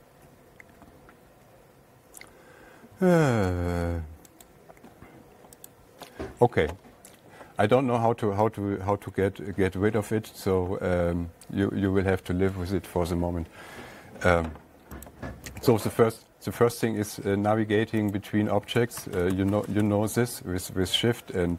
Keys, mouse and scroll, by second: 0.3 right click, 4.9 right click, 6.1 click, 9.4 Page_Up, 14.1 alt+Tab, 15.5 click, 17.0 Tab, 18.6 click, 19.2 Tab, 19.4 Tab, 19.6 Tab, 19.8 Tab, 19.9 Tab, 20.2 Tab, 20.5 Tab.